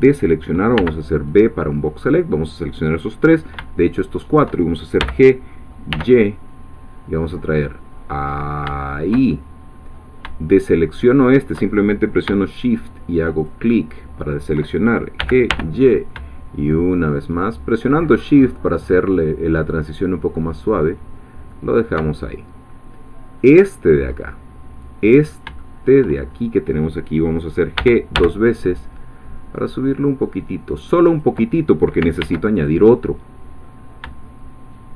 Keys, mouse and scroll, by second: 0.7 b, 1.3 click, 4.0 shift+click, 5.0 g, 5.9 y, 9.0 shift+click, 13.5 shift+click, 15.2 g, 15.5 y, 21.7 shift+click, 23.5 click, 24.0-25.5 scroll up 1, 25.6-26.5 shift+middle drag, 27.8 g, 31.1 click, 32.2 ctrl+r, 32.6 ctrl+click.